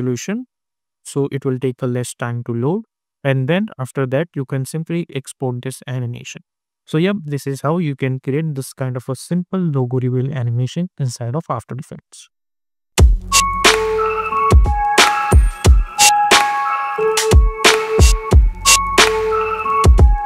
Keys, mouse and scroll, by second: 0.7 space, 2.5 click, 5.8-9.2 drag.